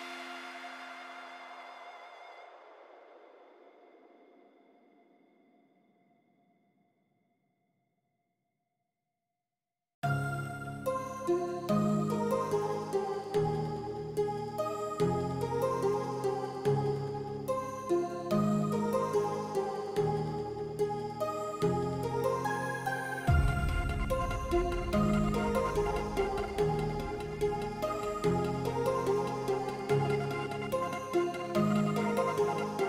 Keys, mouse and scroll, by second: 1.5 middle click, 2.9 click, 5.2 shift+middle click, 5.8 middle click, 7.8 KP_0, 8.7 shift+middle click, 10.2 shift+middle click, 15.9 shift+middle click, 17.6 shift+middle click, 18.3 click, 18.7 Tab, 19.9 g, 22.0 alt+h, 22.5 click, 23.1 ctrl+click, 23.5 shift+middle click, 24.0 shift+click, 24.3 shift+middle click, 24.9 h, 26.0 ctrl+z, 26.5 g, 27.5 h, 28.2 click, 28.8 ctrl+click, 30.3 middle click, 30.8 shift+middle click, 32.5 shift+middle click.